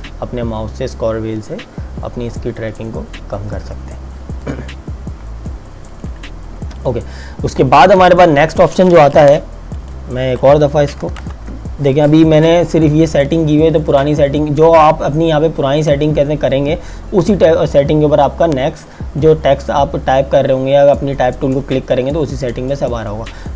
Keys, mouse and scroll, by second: 5.9 click, 9.2 t, 9.7 click, 11.2 ctrl+KP_Enter, 12.6 click, 18.7 click.